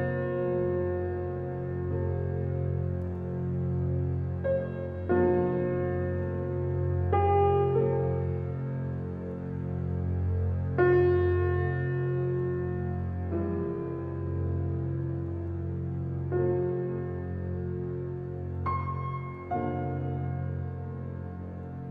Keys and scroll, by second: 7.4 Right, 9.4 Right, 11.4 Right, 14.0 Right, 16.6 Right, 19.6 Right, 21.7 Right.